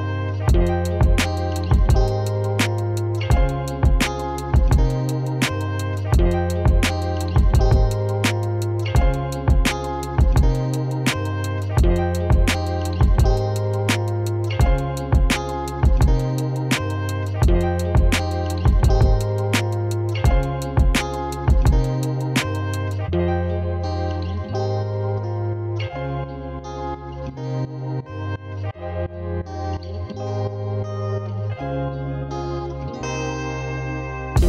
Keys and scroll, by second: 0.1-1.1 typing, 23.5-25.6 typing.